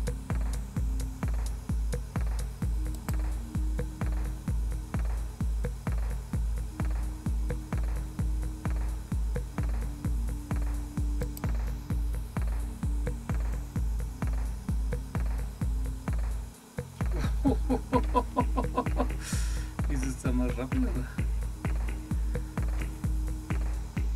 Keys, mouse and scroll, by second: 3.0 click, 11.2 click, 20.0 End, 20.2 Down, 20.5 Home, 20.7 Up, 22.8 Return.